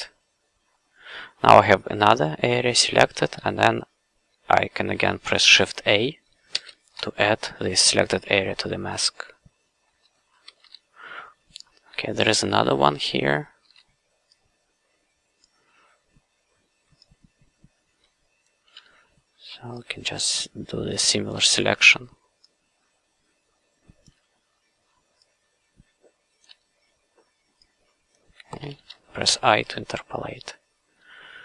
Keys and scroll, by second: 6.5 shift+a, 10.4 q, 13.6 w, 18.7 f, 21.3 f, 24.0 f, 26.4 f, 29.3 i.